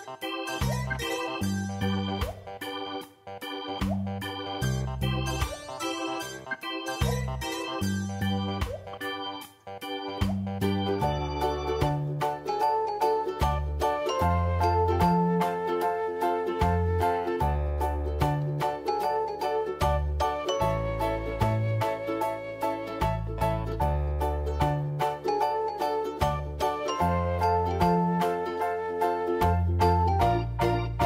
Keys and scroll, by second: 4.8 space, 13.6 space, 29.8 ctrl+Return, 30.3 ctrl+j, 30.5 v.